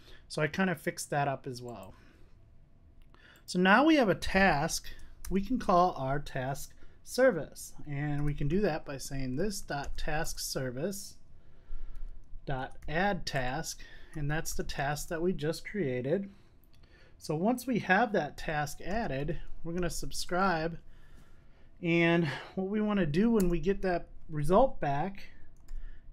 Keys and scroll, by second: 4.8 Tab, 9.2 Tab, 10.3 Return, 14.6 Return, 18.9 Tab, 19.9 Tab, 23.3 Return.